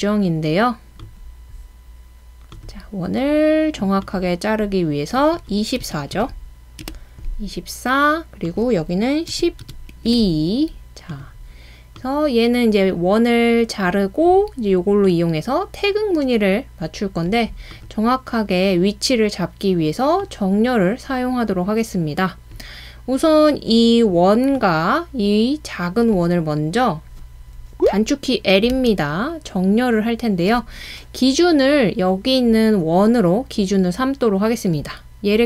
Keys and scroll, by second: 5.8-6.2 typing, 6.8 Return, 8.9-10.6 typing, 12.0-12.7 typing, 28.7 typing.